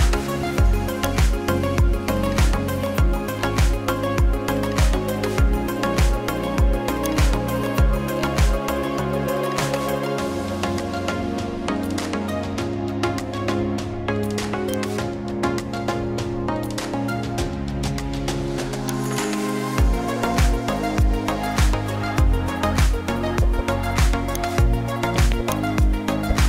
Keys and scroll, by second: 2.8 ctrl+alt+shift+e.